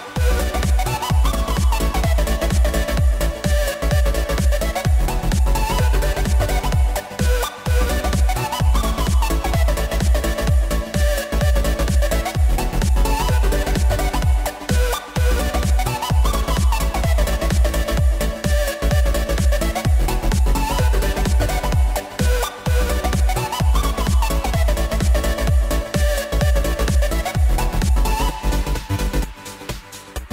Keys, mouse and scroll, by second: 23.1-24.4 drag, 24.4 KP_1, 25.1 KP_3, 27.7 shift+click.